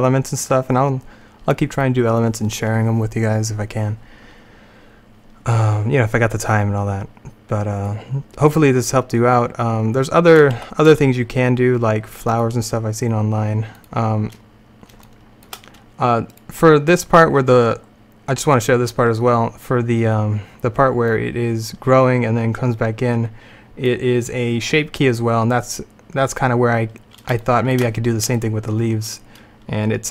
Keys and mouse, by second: 9.4 middle click, 10.4 middle click, 10.7 alt+a, 12.4-15.2 drag, 15.2 middle click, 15.2-16.4 drag, 16.4-18.0 middle drag, 18.0-19.8 drag, 21.2-23.1 drag, 27.5 middle click, 28.6 middle click.